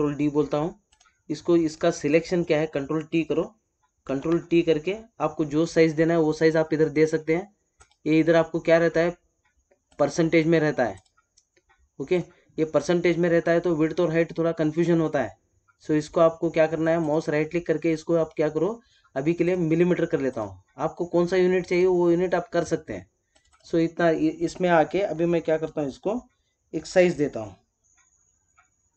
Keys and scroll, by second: 4.0 ctrl+t.